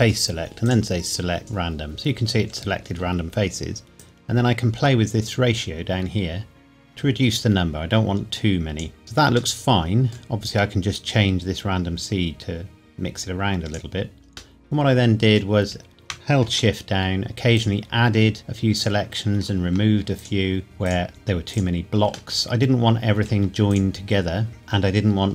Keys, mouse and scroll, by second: 4.0 click, 9.6 middle click, 10.9 click, 14.6 middle click, 17.6 shift+click, 22.3 middle click, 23.7 shift+click.